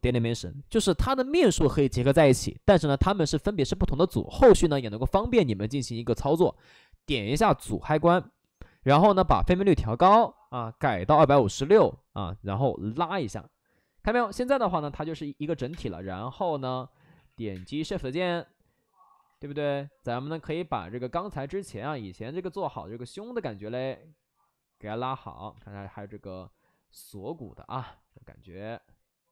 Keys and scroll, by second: 10.6 2, 10.9 5, 11.1 6, 11.3 Return, 15.1 shift+f, 15.3 shift+f, 15.6 space, 16.9 ctrl+z, 17.1 x, 17.5 space, 19.0 ctrl+z, 20.4 space, 24.8 space, 25.5 space.